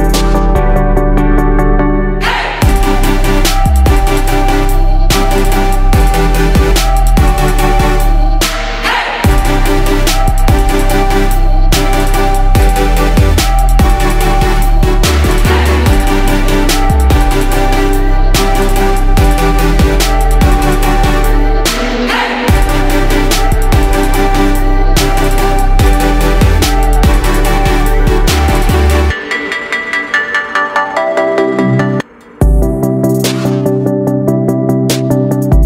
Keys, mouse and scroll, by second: 5.2 shift+click, 10.0 Left, 10.4 Left, 10.6 typing, 11.3 Left, 12.1 click, 13.0-14.7 drag, 15.5 ctrl+g, 17.1 click, 18.0 click, 24.8 ctrl+d, 25.3-27.0 drag, 30.5 ctrl+d, 30.9-32.8 drag, 33.8 ctrl+d, 34.9-35.6 drag.